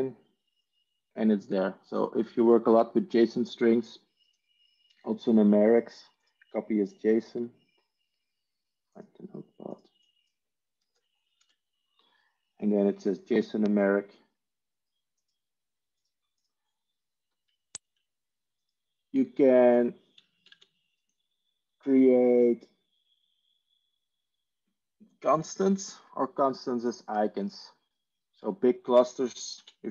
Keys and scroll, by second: 10.8 Delete, 11.3 ctrl+v, 20.2 Tab, 20.6 Tab.